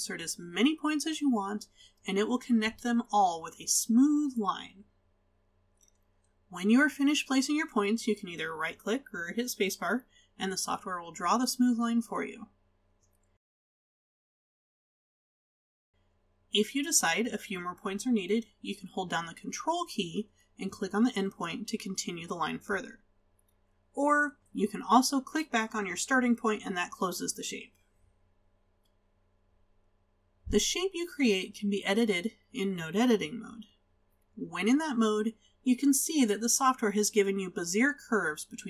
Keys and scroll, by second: 4.0 space, 13.5 space.